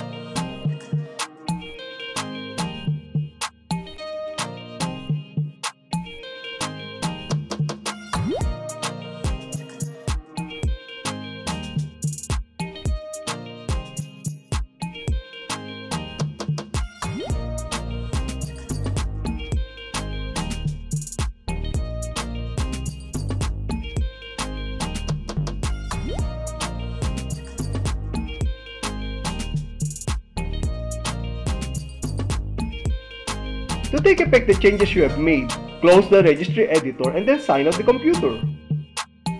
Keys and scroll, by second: 1.9 F5, 3.1 alt+e, 4.1 n, 4.6 d, 9.7 Return, 10.9 Return, 12.8 Return, 14.2 F5, 15.2 alt+e, 16.0 n, 16.8 d, 23.6 Return, 26.2 Return, 27.4 F5, 30.4 alt+e, 31.5 n, 32.8 d, 38.4 Return.